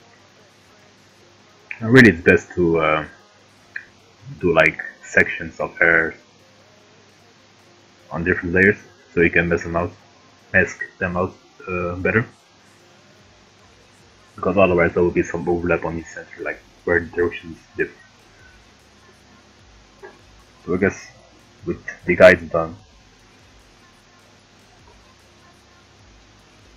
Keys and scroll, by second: 25.7 Down, 26.1 Right, 26.6 Down.